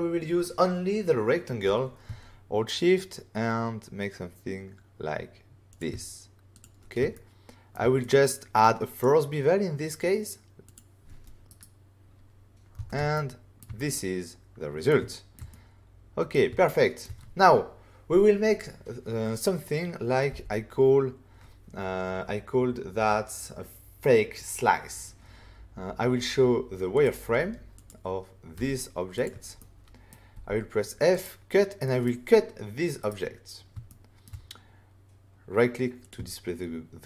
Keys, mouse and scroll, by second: 5.6 shift+click, 6.5 click, 6.6 click, 7.1 ctrl+middle click, 8.0 click, 10.6 click, 10.7 click, 11.4 right click, 12.7 <, 13.1 ctrl+middle click, 13.3 <, 13.7 middle click, 15.0 shift+middle click, 15.4 middle click, 16.6 shift+middle click, 20.2 f, 26.9 click, 27.7 click, 28.5 f, 29.1 click, 29.5 middle click, 31.1 click, 31.8 middle click, 33.0 right click, 33.8 shift+middle click, 34.2 middle click, 36.0 click.